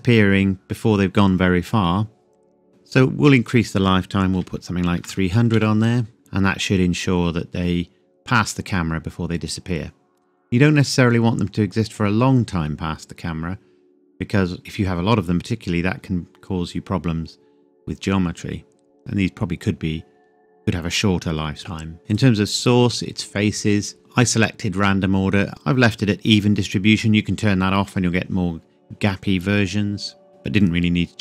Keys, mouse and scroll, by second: 3.4 click, 4.3 KP_3, 5.5 KP_Enter, 6.2 click, 10.0-12.5 scroll down 1, 15.3-17.5 scroll up 1, 22.1 click, 26.9 click, 30.3 click.